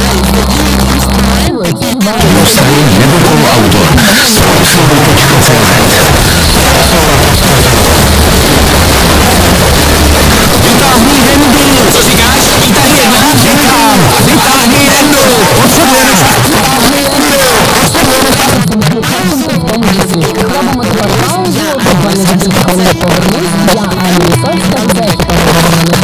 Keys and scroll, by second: 16.3 Page_Down.